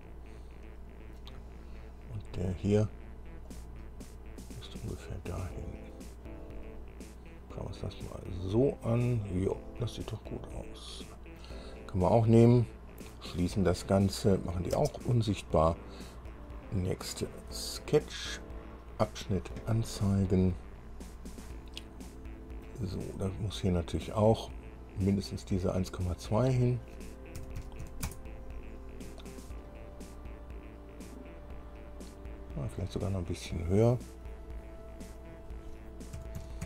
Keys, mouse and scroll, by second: 0.0-1.5 middle drag, 2.3 scroll up 2, 3.7-6.3 drag, 6.4 scroll down 2, 6.8-11.7 drag, 13.1 click, 14.5 click, 14.9 space, 16.5 click, 19.4 click, 20.4-20.7 scroll up 1, 21.5 scroll up 1, 22.0-23.0 drag, 24.3 click, 26.5 click, 27.5 KP_1, 28.0 KP_Decimal, 28.2 KP_Enter, 28.2 KP_2, 29.9-33.1 drag, 35.3 click, 36.3 KP_1, 36.6 KP_Decimal.